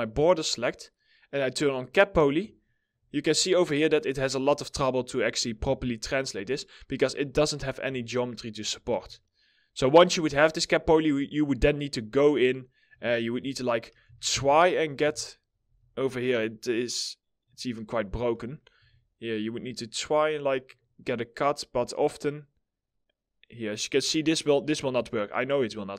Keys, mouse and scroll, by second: 2.2 alt+middle click, 2.6 scroll up 1, 3.0 alt+middle click, 5.2 alt+middle click, 7.6 alt+middle click, 8.4 1, 12.6 alt+middle click, 13.5 w, 13.8 1, 15.2 w, 15.8 right click, 17.8 middle click, 18.4 1, 23.4 right click.